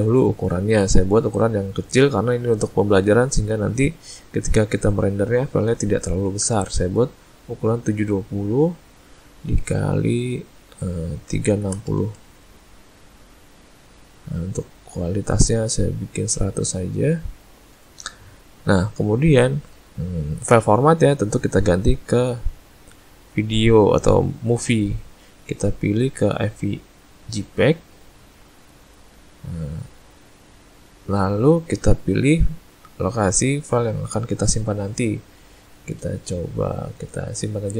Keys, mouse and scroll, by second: 1.3 click, 9.4 click, 21.7 click, 33.7 click.